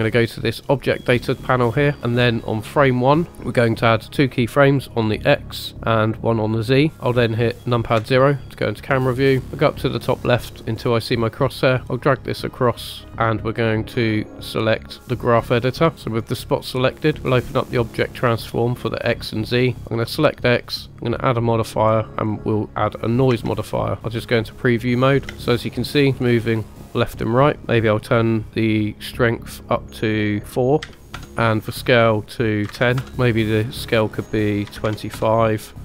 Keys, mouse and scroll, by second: 0.7 click, 3.1 click, 4.8 click, 6.5 click, 6.9 KP_0, 8.0 KP_0, 11.4 click, 11.7-13.1 drag, 13.1 scroll up 1, 14.5-15.3 drag, 15.9 scroll down 2, 16.1 click, 17.8 click, 19.6 click, 20.6 click, 21.0-23.3 drag, 23.3 space, 24.0 click, 24.0 scroll down 4, 24.6 click, 25.4 space, 27.6-31.2 drag, 31.4-33.0 drag, 33.9 click, 34.9 click.